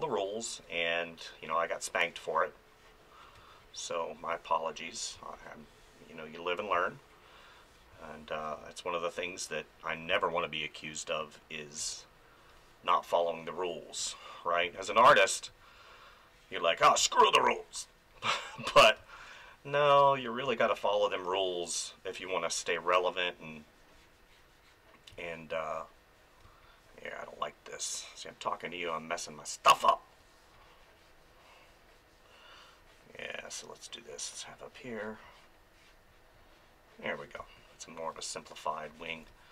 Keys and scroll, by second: 0.0 space, 3.4 space, 5.1 space, 6.8 space, 10.1 space, 14.6 space, 19.0 space, 25.1 space, 29.6 space, 37.4 space, 39.3 space.